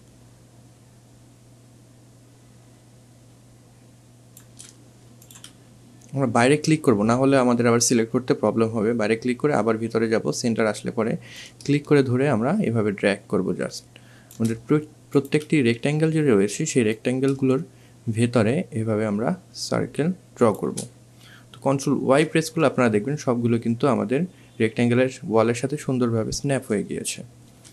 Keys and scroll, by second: 21.8 ctrl+y, 27.3 ctrl+y.